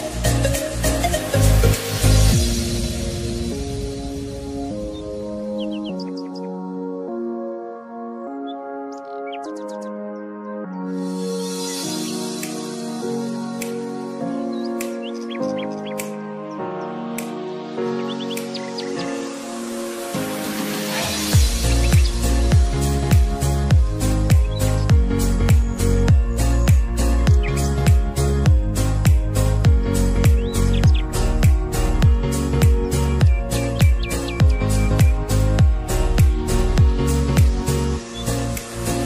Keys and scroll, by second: 24.2 shift+Num_Lock.